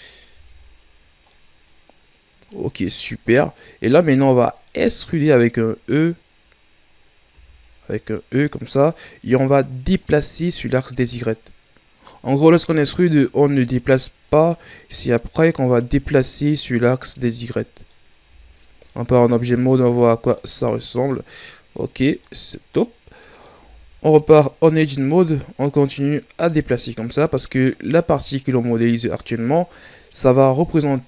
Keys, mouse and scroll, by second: 0.3 z, 0.6-1.3 scroll down 6, 1.3-3.1 middle drag, 3.1-4.7 scroll up 4, 4.7-7.3 middle drag, 7.3 e, 10.0-12.7 drag, 12.7-14.3 shift+scroll down 1, 14.3-17.4 drag, 17.4 scroll down 3, 17.6 middle click, 18.3 Tab, 18.9-20.7 middle drag, 20.7-21.1 scroll down 1, 21.1-22.7 middle drag, 22.7-23.2 scroll up 2, 23.2 middle click, 23.7 Tab, 24.1-25.7 scroll up 3, 25.7-27.8 drag, 27.8-30.9 middle drag.